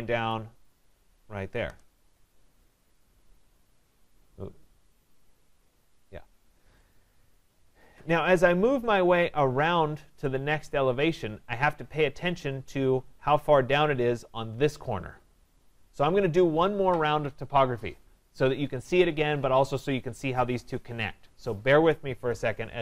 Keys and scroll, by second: 1.7 Return.